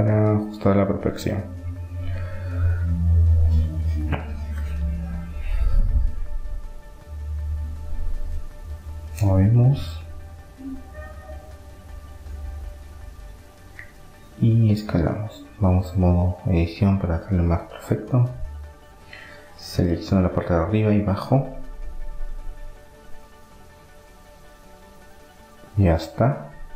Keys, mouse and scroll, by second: 0.2 middle click, 0.6-1.9 drag, 1.9 middle click, 3.3-4.6 drag, 4.6 middle click, 9.3-11.0 drag, 11.0-12.2 middle drag, 13.3 s, 15.8-17.3 drag, 17.3-19.0 middle drag, 20.1-21.9 right drag, 21.0-22.6 drag, 22.6-25.3 middle drag, 25.3-26.7 drag.